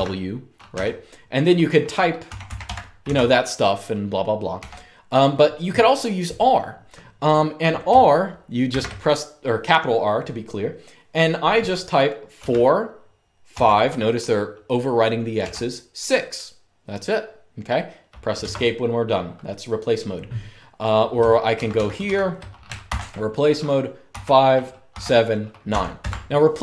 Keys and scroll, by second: 0.0-0.4 typing, 1.7-2.8 typing, 4.3 typing, 8.4 shift+r, 12.1-13.7 typing, 15.1 typing, 18.2 Escape, 21.2-22.6 typing, 23.8-25.4 typing, 25.8 Escape.